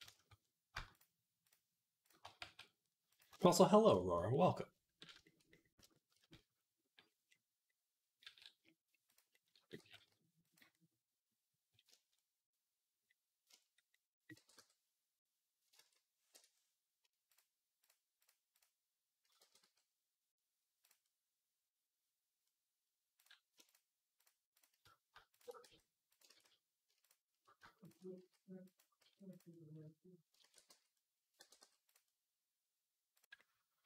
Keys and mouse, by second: 0.7 shift+click, 0.8 shift+middle click, 1.3 shift+click, 1.3-5.0 shift+middle drag, 2.3 s, 8.1 s, 9.6 g, 11.1-24.0 middle drag, 14.2 g, 17.6 shift+click, 18.1 shift+click, 19.2 g, 23.0 click, 23.5 shift+click, 24.4 shift+middle click, 25.2 shift+click, 25.5 s, 26.1 ctrl+z, 27.6 shift+click, 28.0 s, 28.9 s, 30.3 ctrl+a, 31.2 g, 32.5-33.8 middle drag.